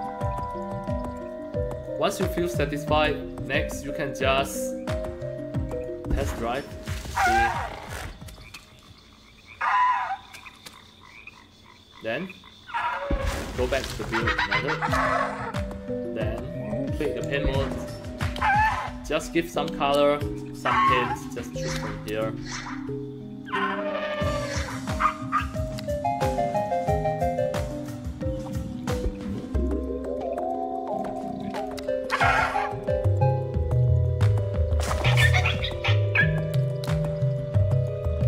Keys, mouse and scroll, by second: 0.5-1.8 alt+drag, 2.0 alt+click, 5.6 click, 12.7 click, 17.2 click, 19.9 alt+click, 21.1 click, 22.0 click, 23.4 click, 24.1 click, 25.3 click, 27.4-27.9 scroll up 3, 28.8 click, 29.6-30.9 alt+drag, 31.5 click, 32.6-33.6 alt+drag, 34.0 alt+click, 37.3 click.